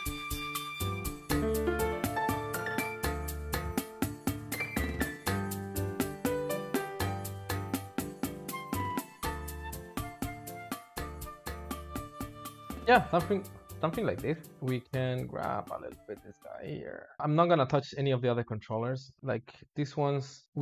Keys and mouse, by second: 0.2 click, 0.7 click, 1.0 space, 1.1 space, 1.6 drag, 2.4 click, 2.5 space, 3.3 shift+click, 3.8 click, 4.2 click, 5.2 drag, 5.4 drag, 5.5-6.8 typing, 5.7 click, 5.8 shift+middle click, 6.0 click, 6.1 shift+middle click, 6.3-6.8 drag, 7.0 alt+shift+z, 7.9 alt+shift+z, 8.2 space, 8.3 drag, 8.7 click, 9.4 click, 9.6-11.5 typing, 10.0 click, 10.1 ctrl+shift+middle click, 10.6 click, 11.0 alt+shift+z, 11.5 click, 14.5 alt+h, 15.3-15.7 drag, 19.4 click, 20.1 click.